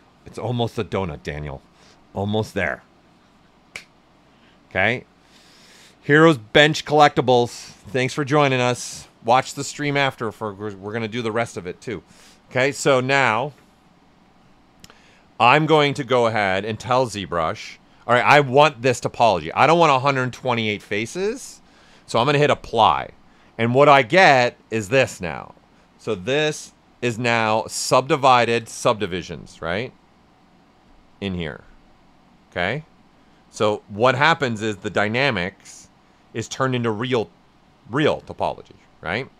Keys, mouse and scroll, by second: 10.9 click, 12.9 alt+right click, 14.9 right click, 16.9-18.9 drag, 22.9 click, 24.9-26.9 right drag, 26.9 shift+f, 28.9-30.9 ctrl+right drag, 30.9 click.